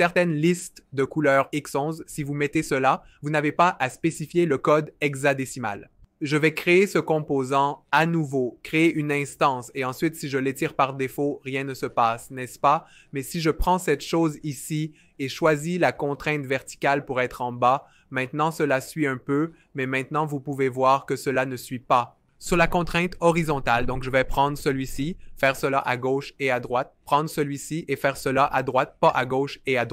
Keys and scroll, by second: 10.8 v, 19.5 v.